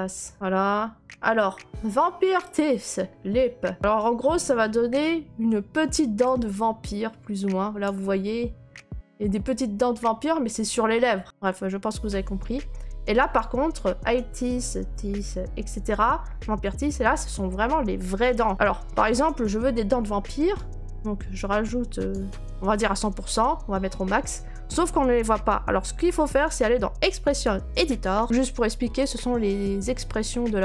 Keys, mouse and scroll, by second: 0.3 middle click, 0.3 click, 2.4 right click, 2.9 middle click, 3.2 middle click, 7.8 click, 8.2 scroll, 11.2 scroll, 12.0 scroll, 15.6 scroll, 22.0-27.1 drag, 27.4-30.6 drag.